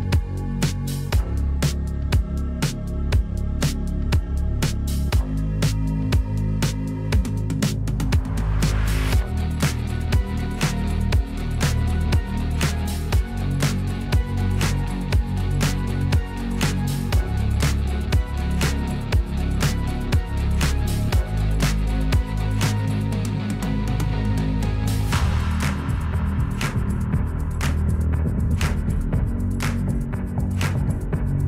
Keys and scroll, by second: 4.4 p, 7.0 \, 17.4 p, 20.1 \, 29.1 p, 31.1 \.